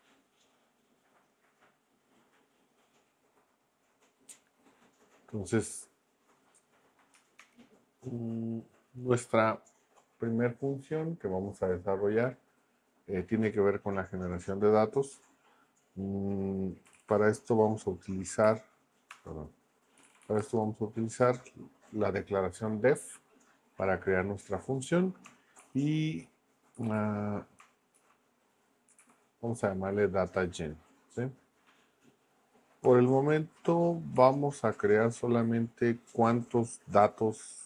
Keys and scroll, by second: 7.4 shift+Return, 16.6-17.4 typing, 18.4 Escape, 19.1 Return, 19.8-20.7 typing, 25.6-29.5 typing, 34.2 shift+9.